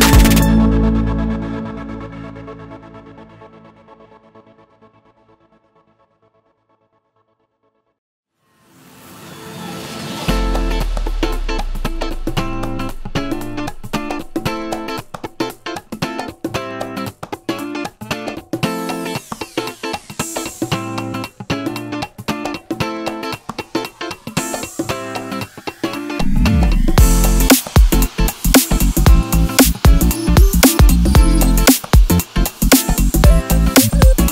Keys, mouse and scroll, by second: 0.4 click, 0.5 click, 0.8 x, 5.4 k, 8.6 click, 8.8 x, 9.2 click, 9.3 x, 12.6 3, 12.7 click, 12.9 x, 13.3 click, 13.7 ctrl+r, 14.3 Escape, 14.8 ctrl+b, 15.8 click, 16.1 x, 17.8 ctrl+s, 19.9 click, 20.1 3, 20.2 click, 20.4 click, 21.0 i, 24.6 3, 24.8 click, 25.3 x, 26.8 alt+click, 27.4 x, 28.3 click, 29.1 g, 29.8 click, 31.3-33.3 typing, 31.6 click, 31.8 middle click, 32.1 scroll down 2, 32.4 click, 33.0-34.3 middle drag.